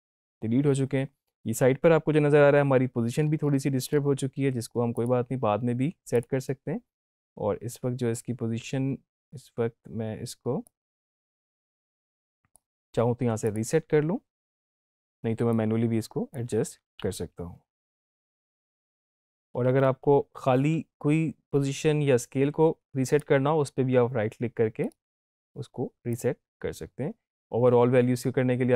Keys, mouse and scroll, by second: 3.2 scroll down 1, 3.4 scroll up 1, 4.9 click, 11.0-12.9 drag, 15.8-16.5 click, 16.9 ctrl+z, 18.5 right click, 18.9 click, 19.9 ctrl+z, 23.1 click, 24.8 right click, 26.1 click.